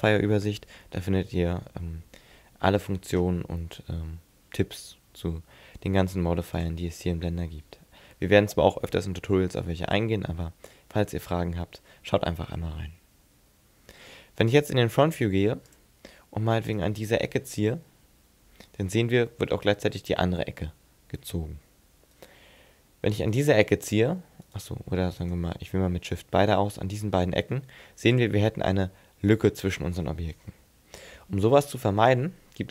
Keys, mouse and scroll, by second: 6.6 click, 14.5 click, 16.7 right click, 17.7 g, 22.3 right click, 23.3 right click, 23.6 g, 24.6 right click, 25.2 shift+right click, 26.6 g, 28.2 click, 28.6 middle click, 31.0 ctrl+z.